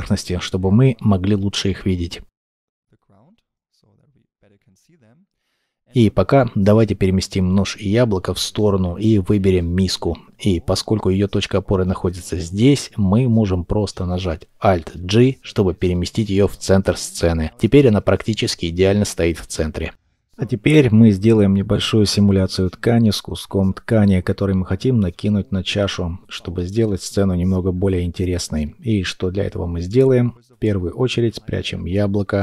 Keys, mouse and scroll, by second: 3.2 scroll down 1, 3.5 middle click, 4.2-4.8 scroll down 1, 4.8 middle click, 10.7 middle click, 13.7 alt+g, 14.5 scroll up 1, 16.0 shift+middle click, 17.2 scroll up 1, 17.3-17.7 scroll down 1, 17.7 shift+middle click.